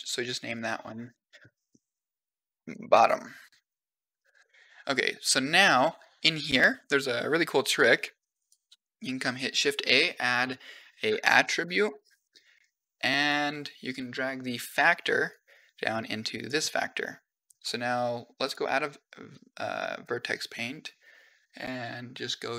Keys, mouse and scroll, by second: 0.1 click, 0.2-3.4 drag, 2.3 t, 4.0 click, 7.6 middle click, 8.2 click, 8.6 shift+a, 11.2 t, 15.1-16.3 drag, 18.3-22.3 drag.